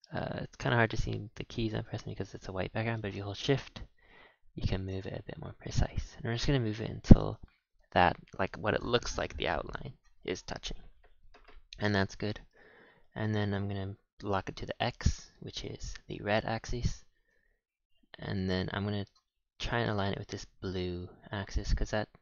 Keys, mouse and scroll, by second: 0.4 scroll, 1.1 middle click, 1.5 middle click, 2.6 middle click, 2.6 scroll up 1, 3.2-11.0 middle drag, 10.9 scroll down 10, 11.5-12.2 scroll down 1, 12.2 shift+middle click, 13.7 g, 17.4 g, 19.7-20.5 middle drag, 21.4 g.